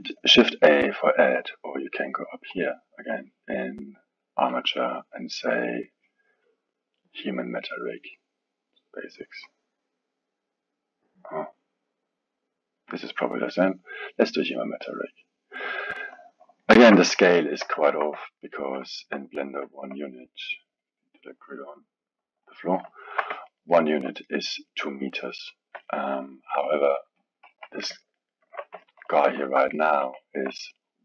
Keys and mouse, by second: 2.5-5.7 drag, 16.6-20.5 alt+middle drag, 20.5-23.0 drag, 23.0-27.2 alt+middle drag, 27.2 click, 27.5 KP_1, 28.0-31.0 ctrl+middle drag.